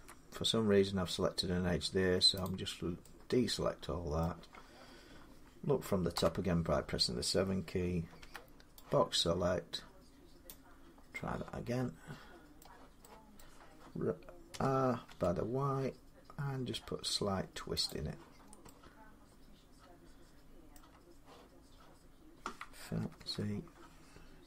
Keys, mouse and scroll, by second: 2.3 click, 4.0 middle click, 5.9 7, 8.0 b, 9.1 middle click, 10.3-12.1 drag, 12.5 middle click, 13.2 middle click, 14.3-14.9 typing, 16.4 r, 17.7 click, 18.2 middle click, 18.2 middle click, 20.5 middle click, 20.9-22.6 scroll down 3, 23.0 ctrl+z.